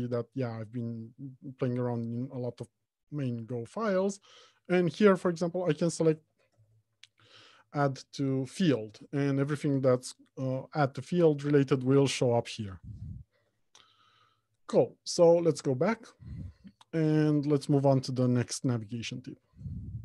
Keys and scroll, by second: 16.1 ctrl+Tab, 18.9 alt+Home, 19.3 Left.